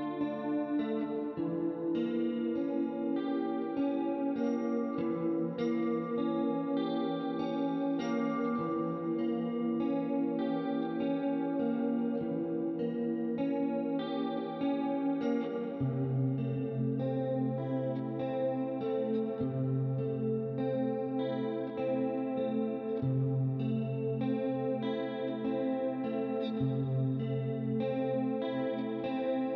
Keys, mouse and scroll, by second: 1.2 click, 3.9 click, 4.3 right click, 5.6 click, 6.8 KP_0, 6.9 Return, 8.5 click, 9.8 KP_3, 9.9 Return, 10.5 right click, 11.7 click, 13.5 click, 15.6 click, 16.2 right click, 17.4 middle click, 18.2 click, 18.9 click, 19.2 middle click, 20.9 KP_2, 21.2 Return, 22.2 click, 23.3 KP_1, 23.4 KP_0, 23.7 Return, 24.1 right click, 25.5 click, 26.3 middle click, 28.3 right click.